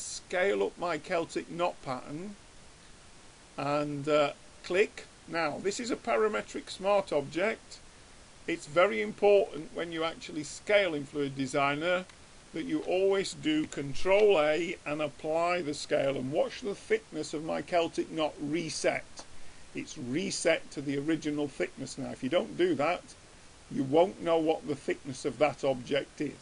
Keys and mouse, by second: 5.6-11.5 middle drag, 12.4 middle click, 14.1 ctrl+a, 24.9-26.4 drag.